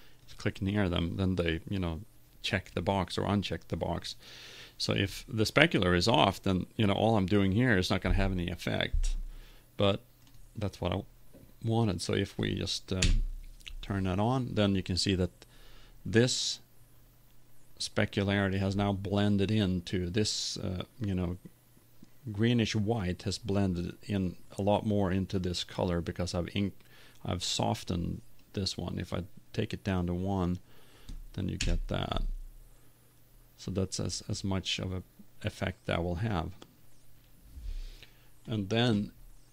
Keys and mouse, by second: 11.7 middle click, 11.9 click, 12.1 middle click, 13.2 F12, 28.7 click, 28.9 click, 30.4-39.4 drag.